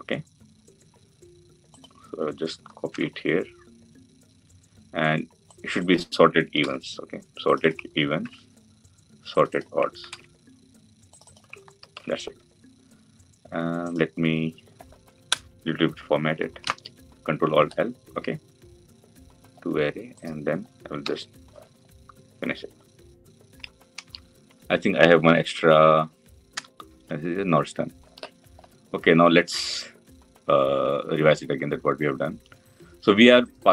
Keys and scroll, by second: 2.8 ctrl+v, 6.3 ctrl+c, 8.0 ctrl+v, 9.9 ctrl+c, 11.7 ctrl+v, 16.5 ctrl+alt+l.